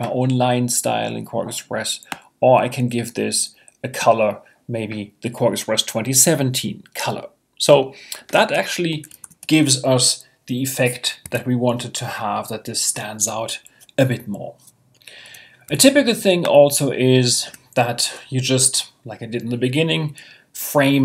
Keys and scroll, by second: 9.2 super+0, 11.2 Escape.